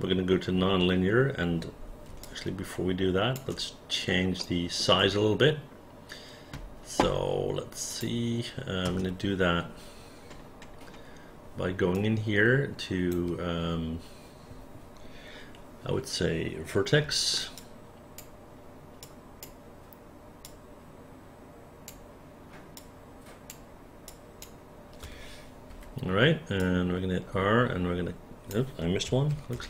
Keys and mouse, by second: 2.3-3.4 alt+drag, 4.5 alt+middle click, 7.9 click, 8.8 space, 12.0-13.1 right drag, 17.6 shift+click, 19.1 shift+click, 20.5-21.9 shift+drag, 22.8 shift+click, 24.1 shift+click, 25.7 r, 26.6-28.5 drag, 29.3 ctrl+z.